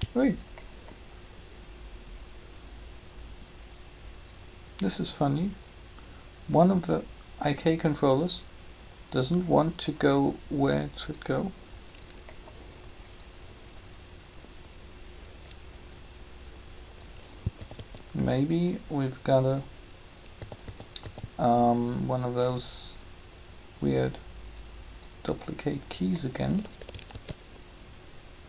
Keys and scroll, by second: 17.6 typing, 20.3-21.0 typing, 27.1 alt+a.